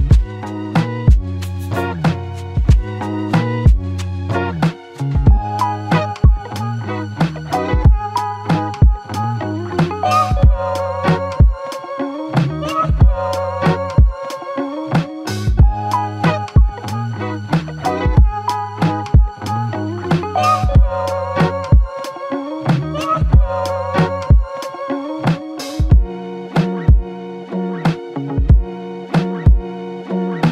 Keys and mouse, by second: 2.5 alt+click, 3.7 double click, 8.3 double click, 19.6 double click.